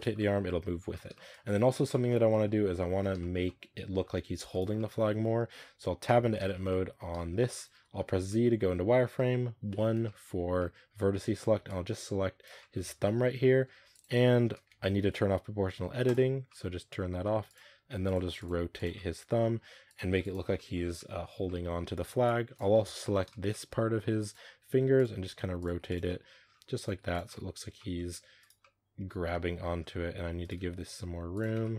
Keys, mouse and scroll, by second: 0.0 scroll up 1, 0.0-2.0 middle drag, 2.0 scroll up 2, 2.2-4.4 middle drag, 4.4 right click, 4.6-5.5 middle drag, 5.5-5.9 scroll up 2, 5.9 Tab, 6.2-7.3 shift+middle drag, 7.3 scroll up 2, 7.4 middle click, 7.6-7.9 scroll down 1, 7.9 z, 8.2-9.6 middle drag, 9.6 1, 9.9 shift+middle click, 10.2 scroll up 1, 10.4 middle drag, 10.7 a, 11.0 a, 12.3 b, 12.4 middle click, 12.6 z, 12.8-13.6 middle drag, 13.6 r, 15.1 ctrl+z, 15.9 click, 16.3-17.0 middle drag, 17.0-20.0 typing, 18.8-19.3 middle drag, 20.4 middle click, 21.2 z, 21.3 middle click, 21.6 a, 22.5 b, 22.7 z, 22.9-23.3 shift+middle drag, 23.3 scroll down 1, 23.4-23.8 middle drag, 23.8-26.7 typing, 25.9-26.3 middle drag, 26.3 scroll down 1, 27.1-27.9 middle drag, 27.9-28.2 scroll up 3, 28.2 right click, 28.5-30.3 middle drag, 30.3 shift+right click, 30.4 g, 31.4 Tab, 31.5-31.7 middle drag.